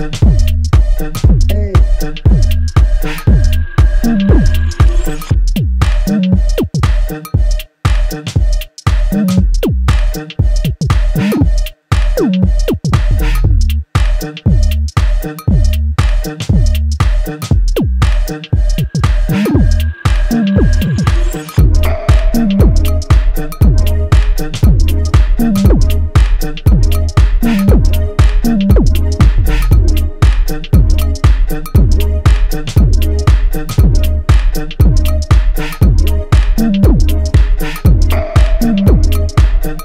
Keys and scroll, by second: 31.2 ctrl+j.